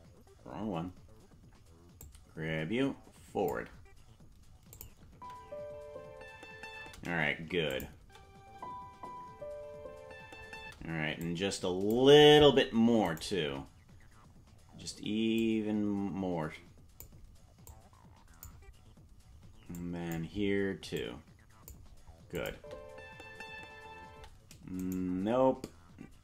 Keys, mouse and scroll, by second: 0.2 ctrl+z, 2.0 click, 4.7 click, 5.1 space, 7.7 click, 7.9 space, 11.2 click, 11.2 space, 13.1 shift+right click, 15.4 click, 17.7 click, 19.7 click, 20.9 click, 22.3 click, 22.5 space, 24.7 right click, 24.7 space.